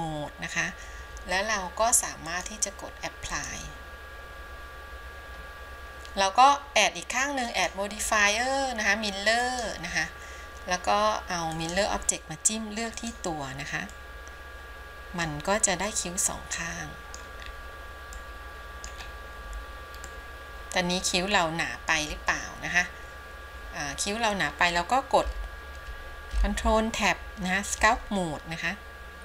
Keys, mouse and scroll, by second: 2.4-4.1 drag, 7.6-9.9 drag, 11.6-12.0 drag, 15.1 middle click, 16.0-17.4 middle drag, 17.6-18.3 scroll down 2, 18.3 middle click, 19.1-20.2 scroll up 2, 20.2-22.1 middle drag, 26.7 ctrl+Tab.